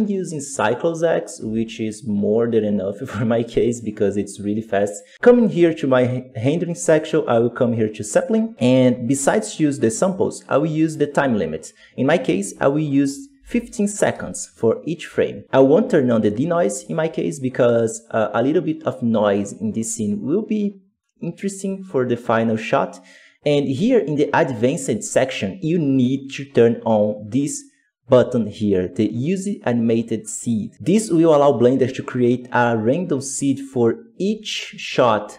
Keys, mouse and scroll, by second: 0.0 click, 1.9 z, 14.0-30.7 drag, 33.8-34.5 scroll up 7, 34.0 middle click.